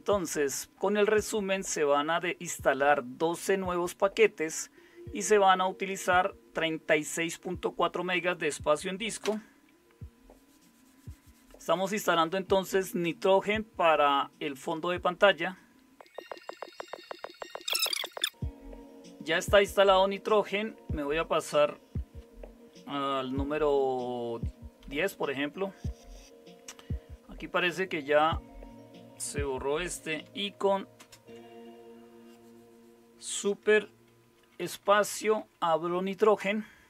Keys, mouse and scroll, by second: 9.2 Return, 24.8 super+0, 30.9 super+space, 34.1-35.8 typing, 36.4 Return.